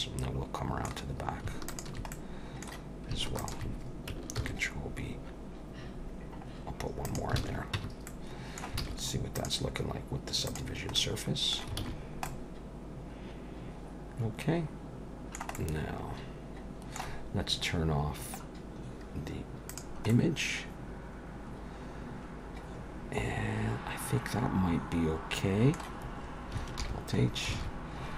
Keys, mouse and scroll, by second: 1.7 alt+shift+click, 2.1 middle click, 3.4 alt+shift+click, 4.4 ctrl+b, 7.4 alt+a, 7.8 Tab, 8.1 middle click, 8.8 alt+a, 9.4 click, 10.7 click, 11.0 middle click, 11.8 alt+a, 12.0-13.0 scroll down 3, 12.2 middle click, 15.5 middle click, 18.6-19.7 scroll down 1, 19.7 click, 20.1 middle click, 26.8 alt+h, 27.2-27.6 scroll down 2, 27.6 alt+a.